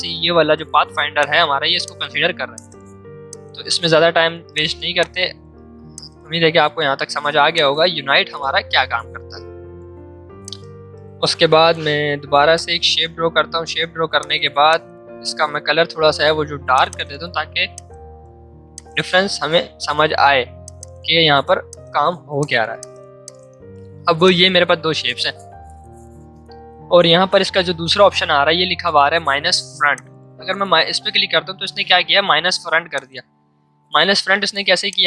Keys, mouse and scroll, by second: 2.0 ctrl+z, 2.5 click, 6.9 space, 8.9-9.6 typing, 10.4 shift+click, 11.4 v, 12.5-14.2 drag, 23.1 space, 23.2 click, 29.9 click, 32.4 ctrl+z, 32.9 click.